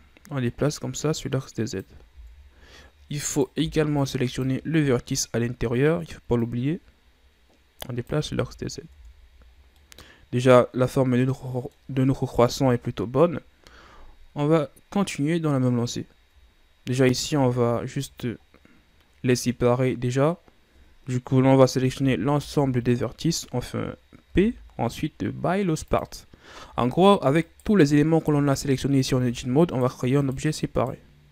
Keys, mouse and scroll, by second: 0.0-2.3 drag, 2.3 ctrl+z, 3.4 right click, 3.7 b, 6.5-8.4 drag, 8.4 z, 9.1 Tab, 9.6-9.9 scroll down 3, 9.9-12.6 middle drag, 12.6 KP_1, 15.1-16.2 scroll up 3, 16.2-16.8 ctrl+scroll down 4, 16.8-17.1 scroll up 1, 17.1 right click, 17.4 Tab, 18.6 scroll down 1, 22.1 a, 22.4 a, 24.4 p, 26.8 Tab, 27.5 right click, 28.3 Tab, 29.4 Tab, 29.8 right click, 30.3 right click, 30.9 right click.